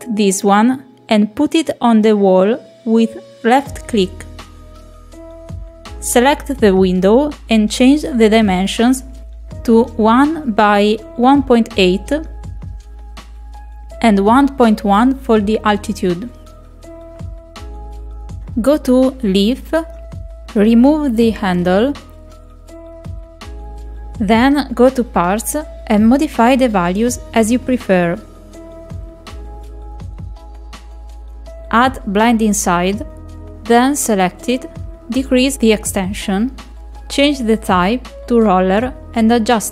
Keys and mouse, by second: 6.3 Escape, 6.9 click, 8.5 click, 10.5 click, 12.6-14.3 drag, 15.8 click, 20.5 click, 21.6-22.7 drag, 23.1 click, 24.0 click, 25.8 click, 27.3 click, 27.5 click, 27.7 click, 28.9 click, 30.5 click, 31.0 click, 32.7 click, 34.8 click, 36.5-37.8 drag, 38.0-39.1 drag.